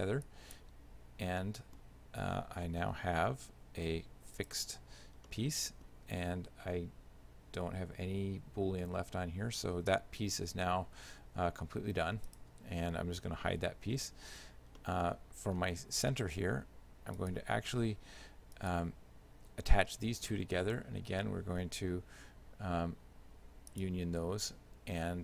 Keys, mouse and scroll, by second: 0.3 click, 1.5 middle click, 2.9 g, 5.3 shift+middle click, 11.0 r, 13.6 h, 14.1 middle click, 14.8 shift+middle click, 17.2 right click, 18.6 shift+right click, 23.8 click.